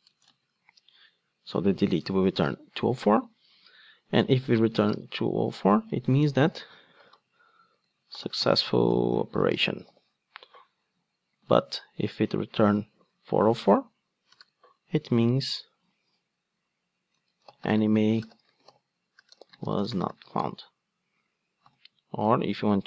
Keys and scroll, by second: 5.3 Return, 11.5 super+d.